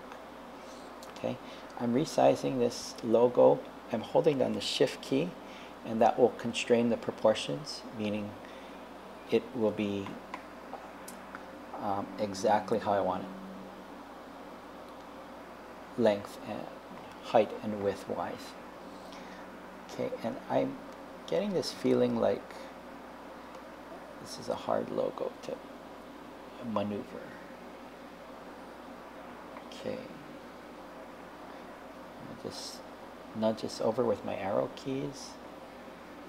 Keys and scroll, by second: 9.7 super+z, 31.6 Left, 33.5 Left, 35.0 Right.